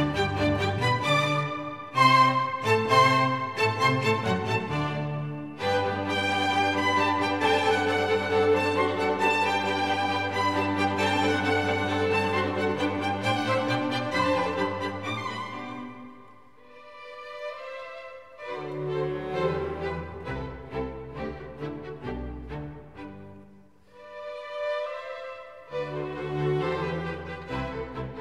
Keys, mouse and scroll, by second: 1.4-3.3 drag, 4.5-11.9 drag, 24.7 shift+z.